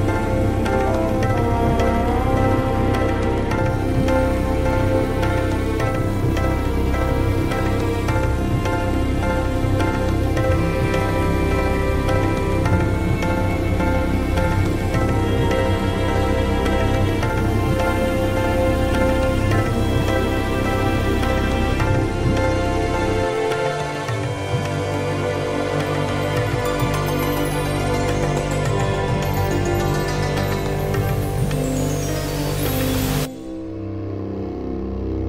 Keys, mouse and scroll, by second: 0.0 click, 1.1 click, 2.2 click, 3.5 click, 4.1 click, 5.8 click, 6.2 click, 8.3 click, 8.8 click, 9.3 click, 10.6 click, 11.0 click, 11.5 click, 12.3 ctrl+z, 13.4 Escape, 13.8 ctrl+scroll up 2, 14.3 click, 15.0 click, 15.6 click, 17.4 ctrl+z, 17.8 click, 18.5 ctrl+z, 18.8 click, 23.6 click, 24.5 scroll down 2, 25.1 click, 25.9 click, 26.9 click, 28.3 click, 28.7 ctrl+scroll down 2, 29.5 click, 30.0 click, 30.7 click, 31.9 click, 32.8 click, 33.8 click, 34.5 middle click.